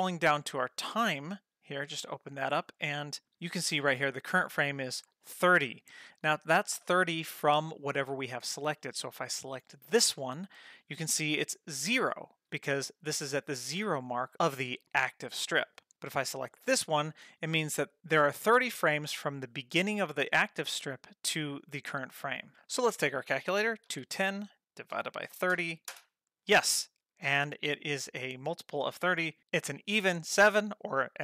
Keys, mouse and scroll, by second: 0.8 click, 0.8 scroll down 1, 1.6 click, 2.1-3.0 scroll down 3, 3.0 scroll down 1, 9.8 click, 16.6 click.